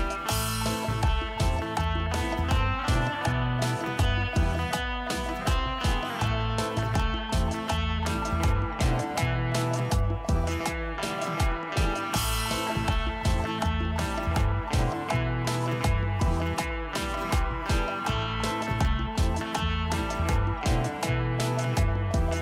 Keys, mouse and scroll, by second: 0.2 ctrl+q, 1.9 ctrl+z, 6.7 ctrl+s, 7.3 ctrl+s, 16.0 ctrl+space, 21.8 right click.